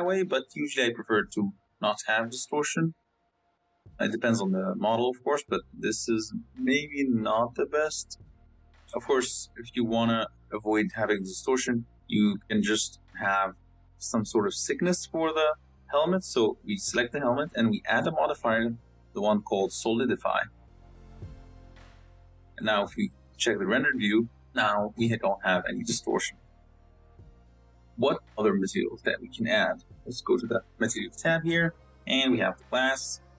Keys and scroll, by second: 12.9 z, 13.7 z, 22.6 z.